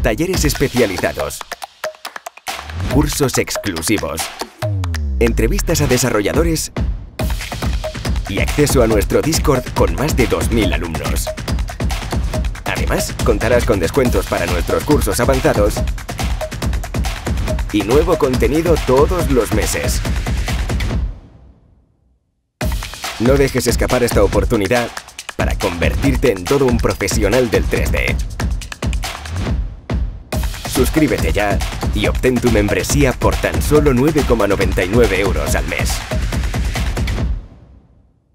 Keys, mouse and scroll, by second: 0.0 click, 0.4 middle click, 0.5 click, 0.8 middle click, 1.0 click, 2.7 e, 3.0 alt+z, 3.1 scroll up 3, 3.2 alt+z, 3.3 alt+g, 10.6-13.1 middle drag, 17.3-18.4 drag, 18.4 middle click, 18.6-19.6 drag, 26.4 click.